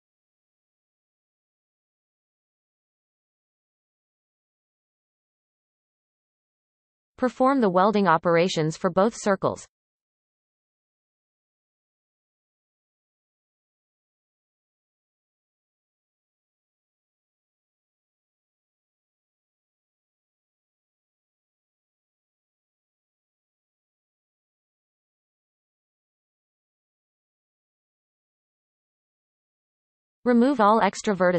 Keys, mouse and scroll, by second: 0.6-2.2 scroll up 6, 0.9-2.2 middle drag, 2.2 r, 5.8-7.8 scroll down 26, 7.8-8.1 scroll up 2, 8.1 scroll down 4, 8.2 shift+middle click, 8.6 click, 8.8 ctrl+KP_6, 8.9 ctrl+KP_Add, 9.3 right click, 9.4 scroll up 3, 9.5 shift+middle click, 9.7 click, 9.8-11.7 typing, 10.0-10.4 scroll up 7, 10.1 shift+middle click, 10.3 shift+middle click, 10.4 shift+middle click, 11.4 click, 11.5 scroll down 10, 12.0 shift+middle click, 12.1-12.6 scroll up 6, 12.2 shift+middle click, 12.7 click, 12.8 ctrl+KP_6, 13.0 ctrl+KP_6, 13.4 ctrl+KP_Add, 13.5 shift+middle click, 13.7 click, 14.0-14.4 right drag, 14.4 click, 14.4-14.8 scroll up 4, 14.5 shift+middle click, 14.8 g, 15.3 scroll up 2, 15.6 g, 16.0 b, 16.3 m, 16.5-17.8 scroll down 22, 17.9 e, 18.6 shift+middle click, 18.7-19.1 scroll up 11, 19.1 click, 19.5 right click, 19.7 scroll up 3, 19.8 shift+middle click, 19.9 click, 20.1 shift+middle click, 20.3 g, 21.0 b, 21.2 m, 21.5 click, 21.5-22.1 scroll down 13, 22.4 e, 22.8 shift+middle click, 22.9 scroll up 3, 23.0 shift+middle click, 23.6 shift+click, 23.9 right click, 24.1 click, 24.2 shift+middle click, 24.3 scroll up 3, 24.5-27.1 typing, 25.0 shift+middle click, 25.0-25.5 scroll up 1, 26.7-27.1 scroll down 20, 27.4-27.8 scroll down 3, 27.8-28.4 shift+middle drag.